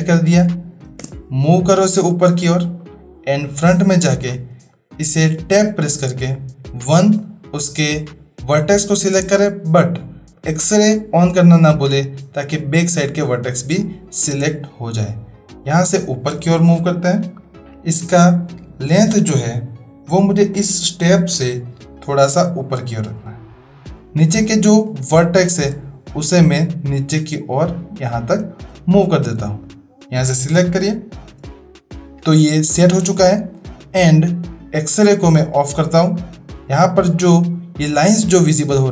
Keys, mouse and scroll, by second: 0.8 space, 1.9-2.8 drag, 4.7-5.1 shift+middle drag, 5.5 Tab, 6.6 1, 7.3-7.8 drag, 10.4 click, 11.7-12.8 drag, 15.1-15.8 drag, 16.6 shift+middle drag, 16.8-17.1 shift+drag, 22.3-24.3 drag, 25.3 shift+middle drag, 25.3-25.7 shift+drag, 26.3-28.2 drag, 28.9 shift+click, 29.7 click, 32.2 Tab, 36.2-36.7 middle drag.